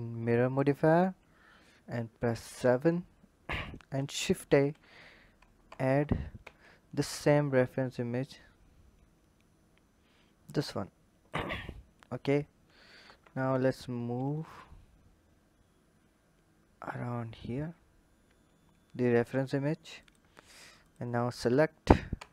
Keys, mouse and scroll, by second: 2.3 KP_7, 4.4 shift+a, 5.7 Tab, 6.4 shift+a, 11.1 click, 13.0 g, 20.7 click, 21.2 click, 22.1 Tab.